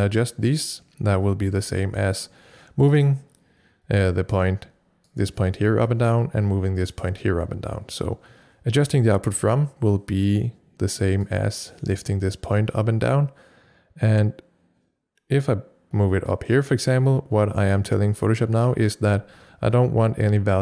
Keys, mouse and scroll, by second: 4.4-6.9 drag, 11.3 click, 11.4-20.6 drag.